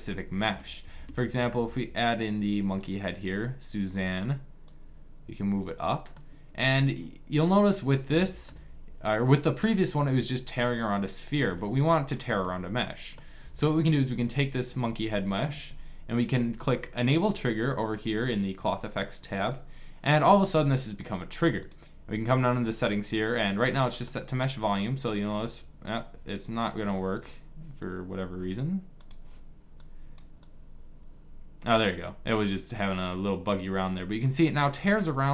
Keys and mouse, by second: 0.5 shift+a, 5.8 click, 8.0 middle click, 11.1 s, 13.1 s, 19.4-20.5 drag, 23.4-24.7 middle drag, 24.7 click, 26.2 click, 29.2-32.2 drag, 34.2-35.3 middle drag.